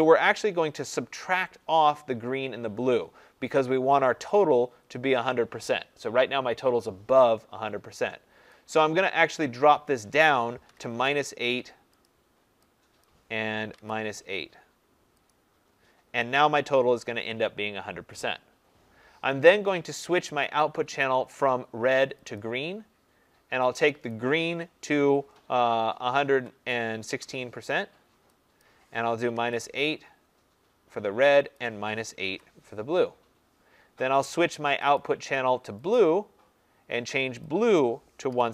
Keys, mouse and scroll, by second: 8.9-10.6 drag, 10.3-11.1 typing, 12.0 click, 13.0 click, 13.6 -, 13.9 8, 15.2 click, 20.6 click, 22.3 click, 24.1 click, 26.0-27.5 typing, 28.6 click, 29.0-29.7 typing, 31.5 click, 32.1 typing, 34.9 click, 35.9 click, 37.7 click, 38.0-38.5 typing.